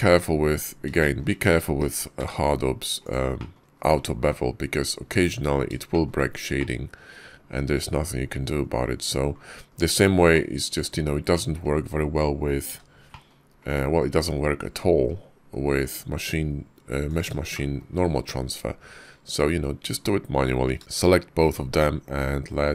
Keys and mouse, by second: 0.4 click, 0.8 shift+click, 1.7 g, 3.2 click, 3.6 KP_5, 4.6 KP_5, 5.8 shift+click, 6.4 click, 8.7 KP_5, 9.5 KP_5, 10.2 click, 12.5 h, 12.9 click, 13.5 click, 14.3 KP_5, 15.4 KP_5, 16.9 click, 17.4 shift+drag, 20.8 shift+click, 20.8 q.